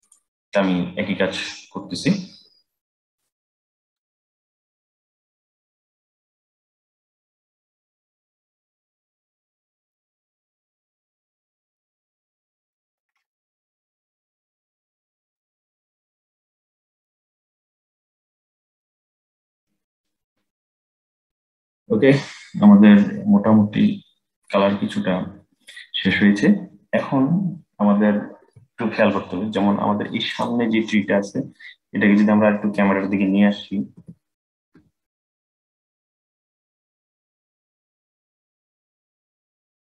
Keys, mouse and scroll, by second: 4.9-6.0 drag, 7.2-8.9 drag, 9.8-11.4 drag, 12.1 click, 13.6-14.8 drag, 15.0-16.7 drag, 17.3-18.9 drag, 19.3 scroll down 12, 19.6-22.4 middle drag, 30.0 click, 33.6 g.